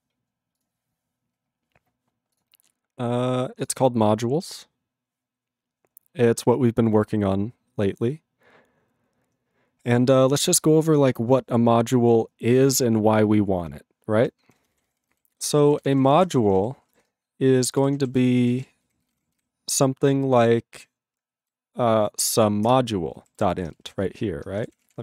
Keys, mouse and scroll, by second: 13.2 ctrl+g, 14.5 ctrl+n, 22.7 ctrl+Return, 23.2 ctrl+=.